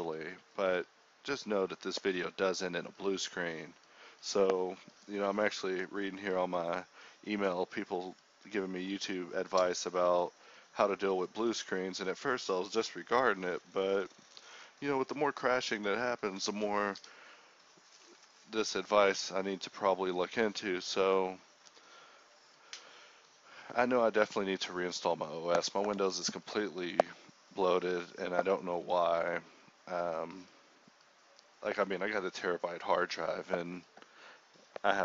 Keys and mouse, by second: 0.0 k, 2.1 alt+s, 3.0 alt+s, 3.6 alt+s, 3.9 alt+s, 4.6 Tab, 4.7 KP_1, 5.9 KP_1, 6.1 KP_3, 6.3 Tab, 7.1-8.6 drag, 14.0-15.2 middle drag, 15.3 c, 18.9 x, 20.1-31.1 typing, 20.7-22.3 drag, 23.4 click, 32.8 z, 33.0 z, 33.3-34.4 drag, 34.4 middle click, 34.8 ctrl+b.